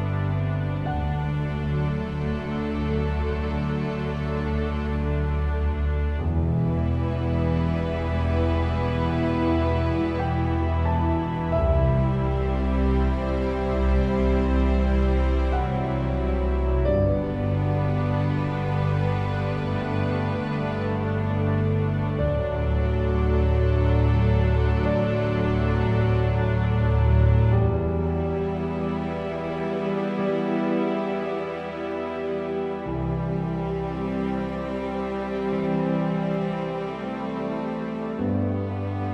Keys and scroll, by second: 18.1 p, 25.5 1, 26.1 5, 26.5 Return, 28.9 m, 31.9 5, 32.7 Return, 35.7 p.